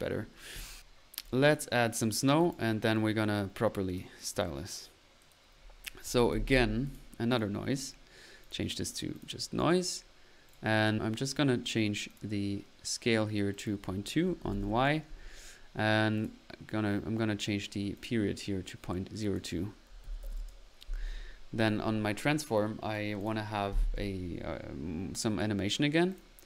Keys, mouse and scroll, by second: 0.7 click, 2.4-2.8 drag, 3.3 click, 4.2 middle click, 5.7-6.9 typing, 6.8 click, 8.4 click, 12.1 click, 13.5-13.8 drag, 16.1 drag, 19.2-19.5 drag, 21.6 click, 26.1 click, 26.2 drag.